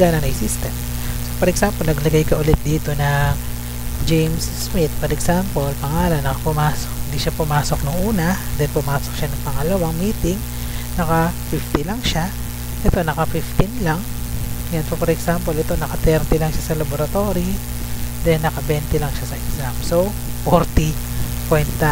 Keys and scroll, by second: 1.5 Down, 3.6-5.7 typing, 5.8 Right, 7.8 0, 8.2 Right, 8.7 1, 9.3 Right, 11.2-14.0 typing, 12.7 Left, 15.8-16.7 typing, 18.5 2, 18.8 0, 19.3 Right.